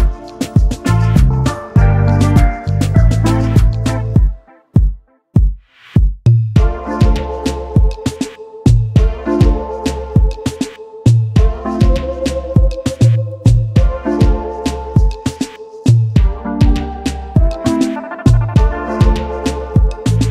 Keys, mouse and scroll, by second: 6.6-7.0 typing, 8.4-9.2 typing, 11.3 double click, 16.7 double click, 19.0 right click.